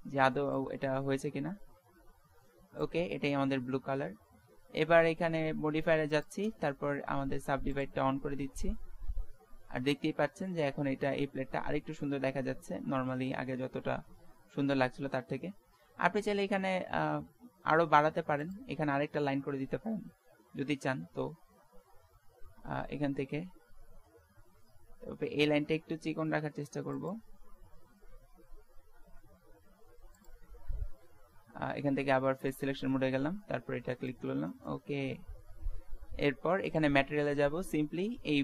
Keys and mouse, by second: 6.2-8.6 drag, 8.6 Tab, 9.0 click, 10.0 middle click, 13.1 Tab, 16.6 Tab, 17.1 Tab, 18.5-20.1 drag, 21.0 ctrl+r, 30.5 Tab, 31.0 Tab, 32.5-34.5 drag, 33.9 right click, 34.5-36.4 middle drag, 36.8-38.3 drag, 38.3 middle click.